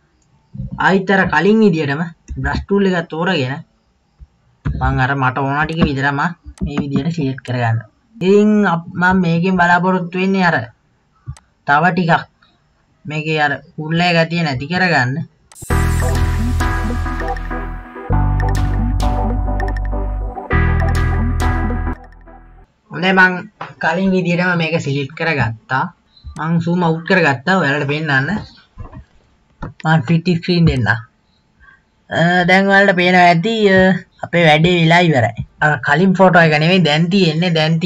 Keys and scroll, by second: 2.4 b, 4.6 ], 4.8 ], 17.2 ], 19.2 KP_1, 19.6 [, 19.6 [.